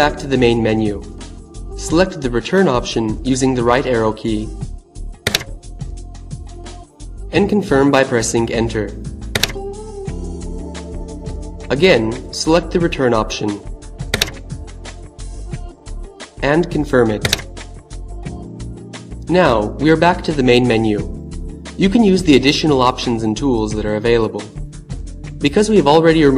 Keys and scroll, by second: 4.2 Right, 8.2 Return, 13.1 Right, 16.7 Return.